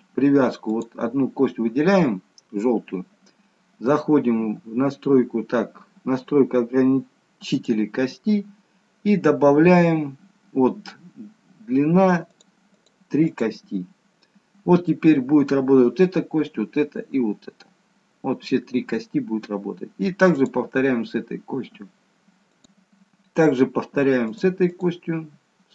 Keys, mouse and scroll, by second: 0.8 click, 7.5 click, 12.3 click, 12.8 click, 20.3 click, 24.4 click.